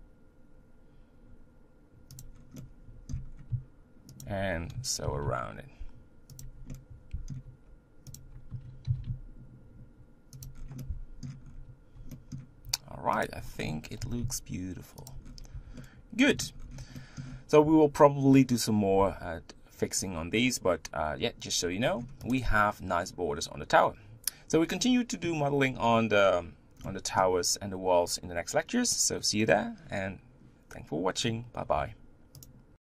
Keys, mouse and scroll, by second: 2.4 scroll down 2, 2.6 middle click, 3.3-4.2 scroll up 1, 4.2 alt+click, 5.0 ctrl+b, 6.7-8.1 middle drag, 8.1 alt+click, 8.8 ctrl+b, 10.6 scroll down 4, 11.1 middle click, 11.4-11.8 scroll up 3, 12.1-13.2 middle drag, 13.2 alt+click, 14.0 ctrl+b, 15.2 scroll down 4, 15.6 Tab, 15.8 middle click, 16.6-17.0 scroll down 3, 17.0 shift+middle click, 17.5-21.4 scroll up 1, 21.9-22.2 scroll down 4, 22.2 click, 26.9-32.7 middle drag.